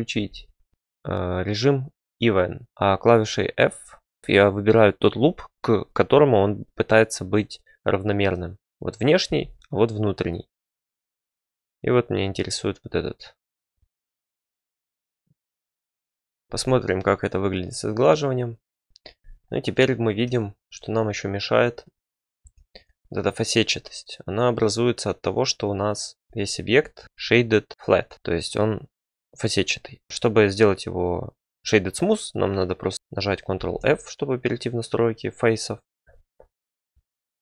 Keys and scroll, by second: 0.1 e, 2.7 f, 9.2 f, 14.2 ctrl+r, 14.6 e, 15.1 f, 15.2 f, 22.4 Tab, 26.2 Tab, 27.7 ctrl+f, 33.5 ctrl+f.